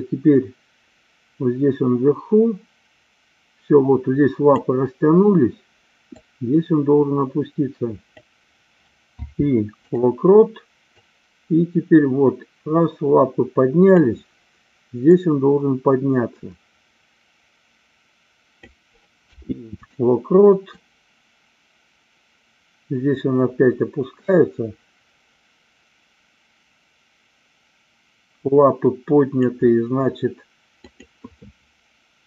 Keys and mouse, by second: 6.1-8.2 drag, 11.0-14.0 drag, 15.1-18.7 drag, 20.7-29.4 drag, 30.7 click.